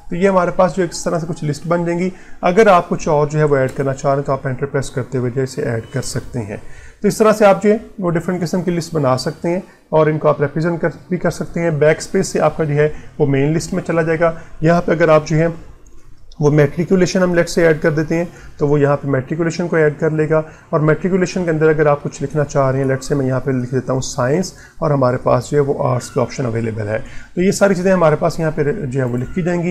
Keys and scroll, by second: 21.9 Tab.